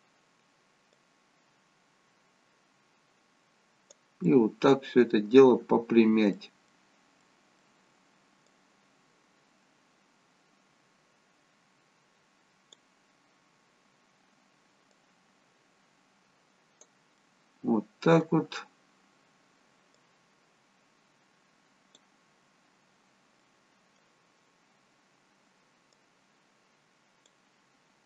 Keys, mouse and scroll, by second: 4.3 middle click, 8.5 click, 15.0 click, 17.2 middle click, 20.0 click, 23.4 middle click, 26.0 click.